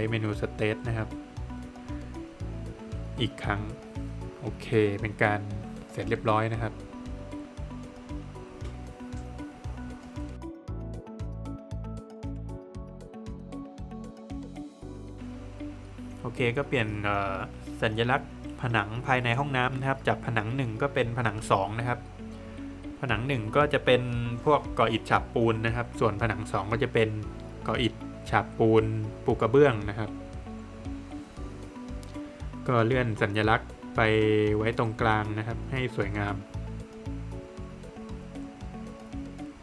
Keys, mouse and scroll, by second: 1.5 space, 2.2 click, 4.0 scroll down 1, 4.3 middle click, 4.6 Escape, 4.8 scroll down 1, 7.8 Escape, 8.5 click, 8.8 double click, 9.8 click, 10.1 double click, 11.1 double click, 15.2 click, 22.9 click, 24.8 click, 28.0 Escape, 28.8 click, 29.5 Escape, 30.2 click, 30.5 double click, 31.6 Escape, 31.9 click, 32.2 double click, 33.3 space, 33.7 click, 36.2 double click, 37.3 middle click, 38.4 space, 38.7 click.